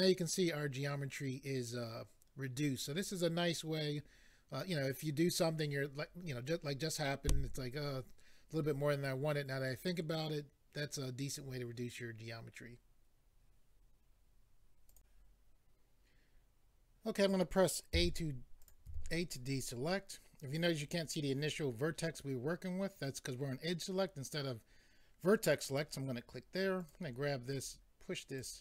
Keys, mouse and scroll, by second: 14.9 click, 18.6 click, 18.9 a, 25.6 click, 26.8 click, 27.5 click.